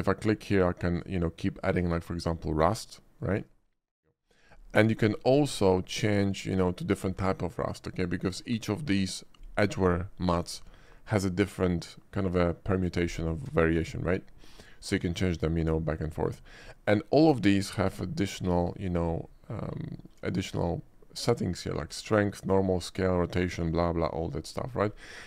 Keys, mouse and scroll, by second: 1.0 click, 2.3 click, 6.0 click, 7.9 click, 16.2 middle click, 16.8 middle click, 17.7 click, 18.6 click, 19.1 scroll down 1, 19.3 middle drag, 20.1 shift+middle click.